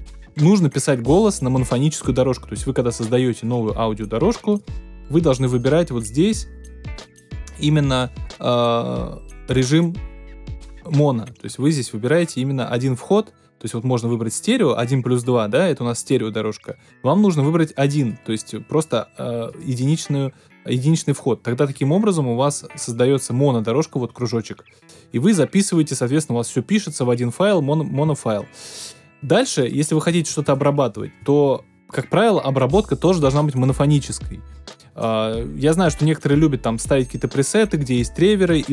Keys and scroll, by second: 30.9 super+BackSpace.